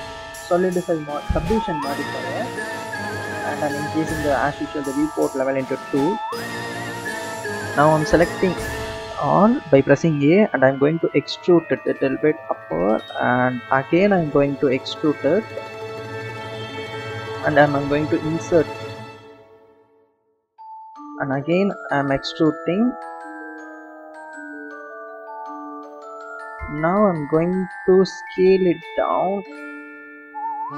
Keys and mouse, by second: 0.3-1.8 drag, 3.2 click, 8.2 a, 11.0 e, 14.1 e, 18.0 i, 22.1 e, 28.6 s, 30.4 s.